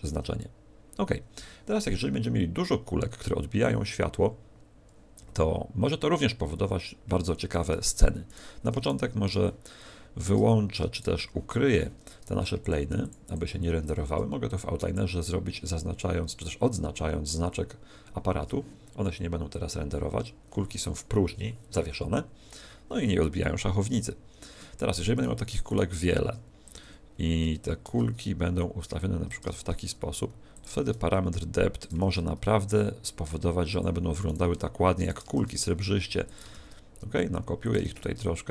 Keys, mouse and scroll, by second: 8.2 right click, 8.7 shift+right click, 9.2 right click, 10.9 shift+right click, 12.5 shift+click, 12.9 shift+click, 13.2 shift+click, 24.5 Escape, 25.1 right click, 25.6 shift+right click, 26.0 s, 26.7 click, 27.8 shift+d, 29.3 click, 29.5 shift+d, 30.5 click, 30.7 shift+d, 31.8 click, 31.9 shift+d, 33.7 click, 34.2 right click, 35.0 right click, 35.3 shift+d, 36.3 click, 36.5 shift+d, 37.7 click, 37.8 shift+d.